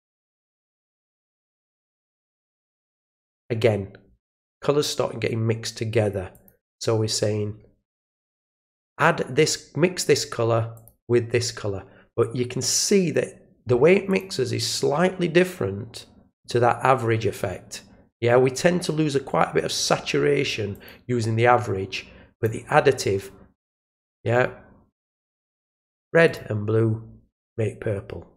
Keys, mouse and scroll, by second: 0.5 click, 2.4 click, 6.3 click, 8.2 click, 8.9-10.1 drag, 10.7 click, 12.6 click, 14.1 click, 16.3 click, 20.7 click, 22.3 click, 25.5 click, 26.2 click.